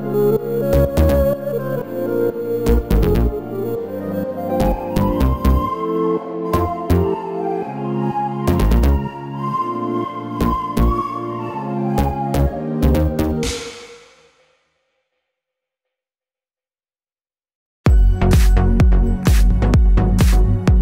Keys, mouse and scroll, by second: 1.1 click, 1.6 s, 2.7 click, 2.8 s, 3.7 middle click, 4.2 click, 4.4 click, 4.7 s, 5.1 scroll up 1, 5.6 middle click, 5.6 r, 6.1 click, 6.9 click, 7.1 click, 7.7 r, 8.0 click, 8.1 s, 8.8 click, 9.2 r, 9.6 click, 10.5 scroll down 1, 10.8 click, 11.1-13.4 middle drag, 12.0 scroll down 1, 12.2 scroll up 1, 13.4 click, 14.7 alt+d, 16.2 r, 17.3 click, 17.4 s, 18.4 click, 18.7-20.3 middle drag, 20.3 click, 20.5-20.8 middle drag.